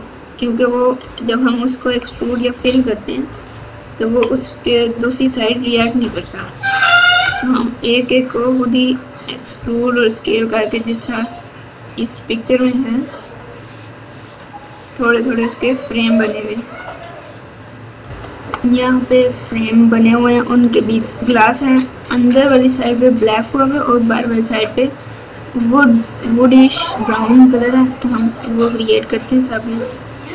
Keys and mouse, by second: 1.0 KP_8, 1.8 KP_2, 2.0 KP_2, 3.2 KP_8, 4.0 ctrl+KP_6, 4.2 ctrl+KP_6, 5.7 ctrl+KP_6, 6.0 ctrl+KP_6, 6.2 ctrl+KP_6, 7.2 KP_Add, 7.5 KP_Add, 13.1-14.4 middle drag, 15.3 middle click.